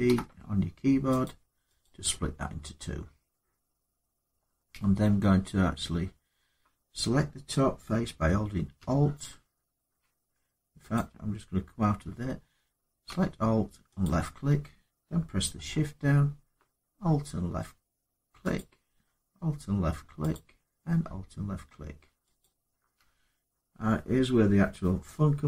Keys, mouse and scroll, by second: 1.0 click, 1.6 click, 10.7 click, 13.8 alt+click, 18.3 click, 20.1 click, 22.2 click.